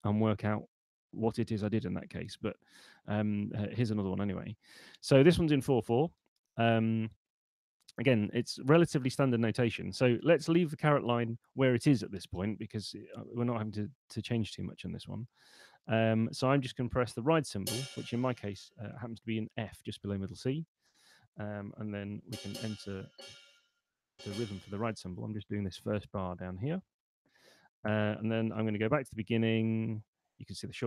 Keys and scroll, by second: 22.0 5, 22.9 6, 24.0 5, 28.8 super+Left.